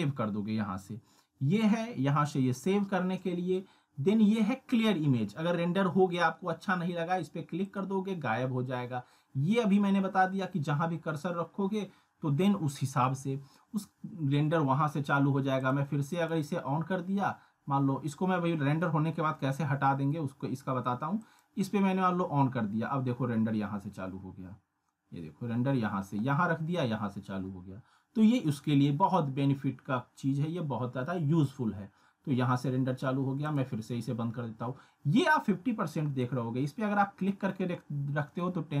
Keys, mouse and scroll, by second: 7.6 click, 15.6 click, 21.2 click, 33.4 click, 36.2-38.1 drag.